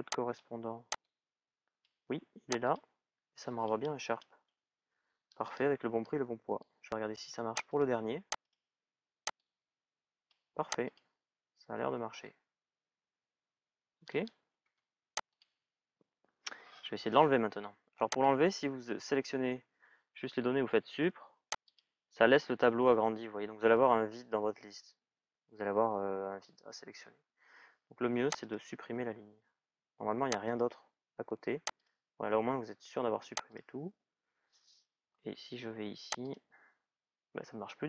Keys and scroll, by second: 14.4 Delete, 20.6 Delete.